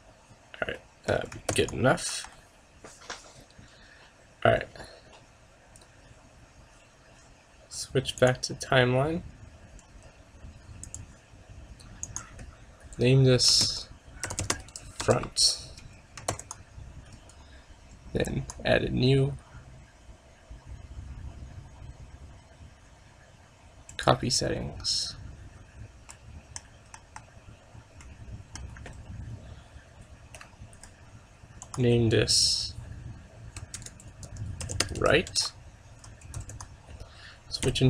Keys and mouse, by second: 0.0-1.0 drag, 0.8 middle click, 1.6 ctrl+s, 2.2 KP_0, 8.3-10.2 drag, 12.1-13.9 drag, 16.4 ctrl+s, 18.4-20.2 drag, 26.2-29.8 middle drag, 27.0 KP_0, 31.7-33.6 drag, 36.4 ctrl+s, 37.7 KP_3.